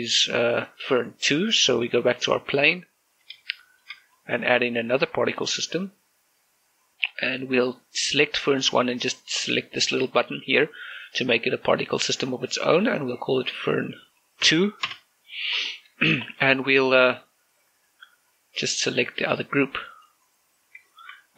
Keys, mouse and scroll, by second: 3.5 click, 3.9 right click, 4.3 shift+middle click, 5.1-5.7 scroll up 1, 6.2 click, 11.7-15.2 drag, 15.3 2, 15.7 Return, 16.1 scroll down 1, 19.5 click.